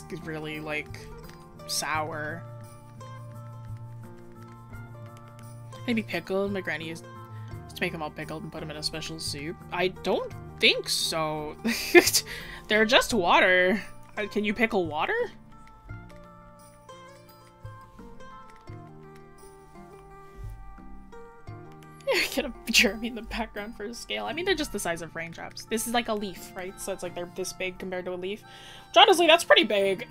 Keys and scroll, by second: 8.9 scroll, 9.5 scroll up 1, 21.8 scroll down 1, 23.9 scroll up 1.